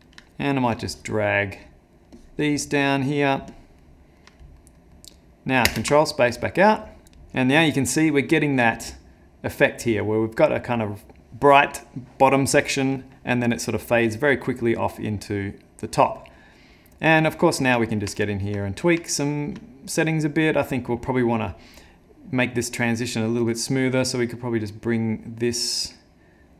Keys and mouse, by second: 0.0 click, 0.3 ctrl+middle click, 0.9 click, 1.6 click, 2.1 click, 2.8 click, 3.5 click, 3.8 middle click, 4.3 ctrl+middle click, 4.8 middle click, 5.9 ctrl+space, 16.3 middle click, 16.8 middle click, 17.2 ctrl+middle click, 17.9 middle click, 18.2 ctrl+middle click, 18.7 middle click, 19.1 ctrl+middle click, 23.7 click, 25.6 click.